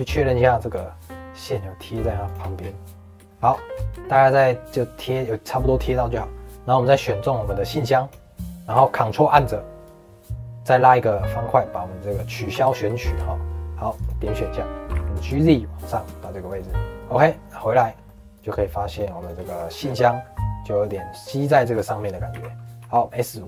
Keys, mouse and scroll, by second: 2.5-3.2 scroll down 4, 3.2 shift+middle click, 3.4 scroll up 2, 3.9-5.8 shift+middle drag, 5.8 click, 9.8 ctrl+click, 12.7-13.9 shift+middle drag, 13.9 shift+click, 14.3 scroll down 2, 14.8 g, 16.7 middle click, 17.7 click, 18.0 middle click, 18.3 click, 18.8 click, 19.2 click, 19.4 shift+middle click, 19.8 scroll up 1, 20.0-21.5 middle drag, 21.5 scroll down 2, 21.7 click.